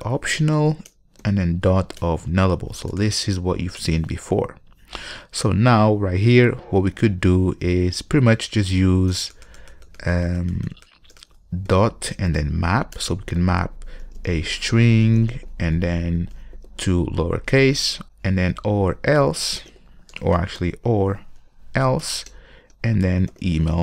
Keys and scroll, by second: 1.1 Return, 7.9 ctrl+shift+super+Return, 9.3 Delete, 13.1 Delete, 13.5 Return, 18.2 Return, 22.2 Return.